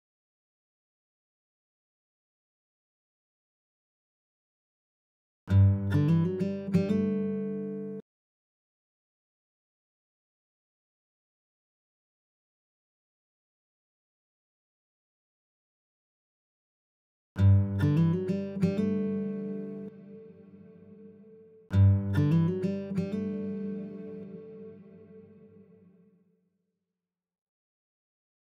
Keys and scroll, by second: 5.4 space, 8.6 space, 17.3 space, 21.5 space, 25.9 space.